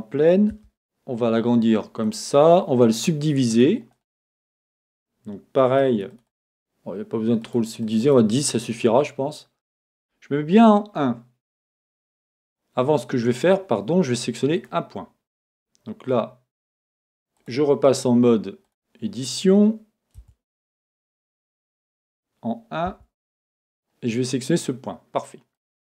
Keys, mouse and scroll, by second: 0.6 s, 2.1 click, 2.9 r, 5.7-8.7 drag, 11.0 KP_1, 12.5-14.6 middle drag, 14.6 click, 17.4 click, 18.6 click, 20.2 Tab, 22.0 KP_1, 22.9 Tab, 23.6-25.9 middle drag.